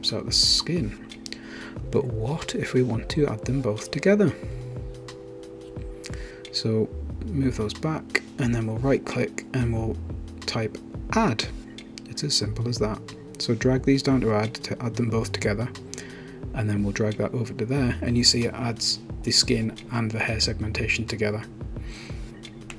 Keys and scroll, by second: 11.7-13.1 typing.